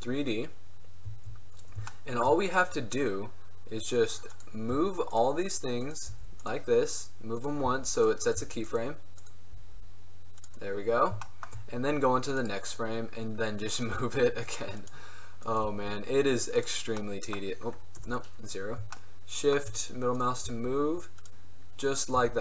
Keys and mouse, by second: 0.7 drag, 4.5 right click, 4.9 g, 6.2 g, 7.8 g, 8.5 g, 9.7 g, 12.5 middle click, 14.0 g, 14.6-17.3 drag, 15.8 g, 18.1 KP_0, 20.6 g, 22.3 g.